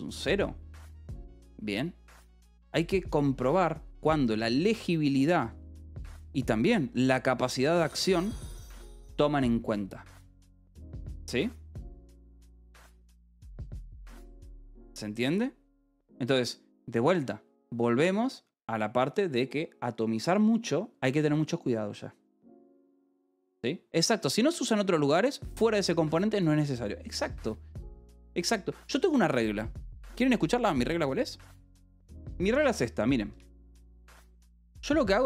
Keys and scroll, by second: 14.4-15.3 typing, 33.5-35.1 typing.